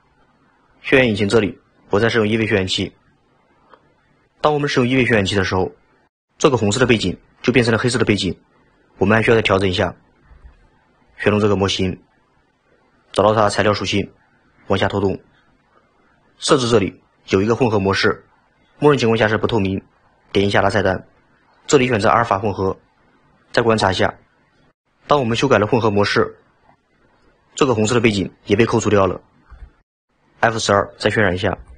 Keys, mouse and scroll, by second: 1.9-4.3 drag, 11.4 click, 13.9 click, 14.5-17.7 scroll down 14, 19.9-23.0 drag, 31.7 F12.